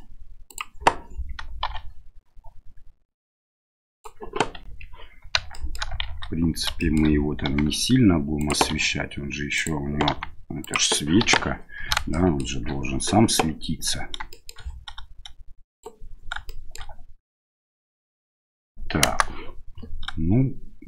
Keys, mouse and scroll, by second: 1.6 r, 4.6 KP_7, 5.5 shift+middle drag, 6.0 shift+z, 6.8 shift+middle click, 7.4 g, 8.7 r, 10.1 g, 11.2 KP_1, 12.2 shift+middle drag, 14.3 shift+middle click, 15.7 click, 16.4-16.7 shift+middle drag, 19.0 KP_0.